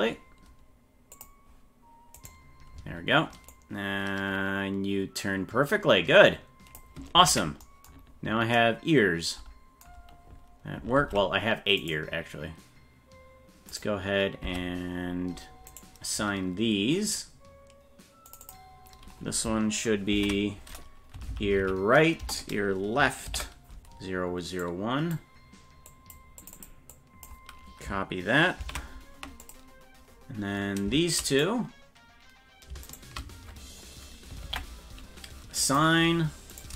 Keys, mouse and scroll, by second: 1.1 click, 2.2 right click, 3.5-6.8 drag, 7.2 ctrl+z, 8.0-8.5 scroll down 4, 11.0 ctrl+Tab, 11.8 right click, 13.8 right click, 14.4 Tab, 15.7 right click, 18.3 click, 18.4-25.1 drag, 21.3 Left, 21.4 Left, 25.9 click, 26.4 click, 26.5-31.4 drag, 32.8 shift+right click, 34.4 ctrl+l, 35.6 click, 36.5 right click.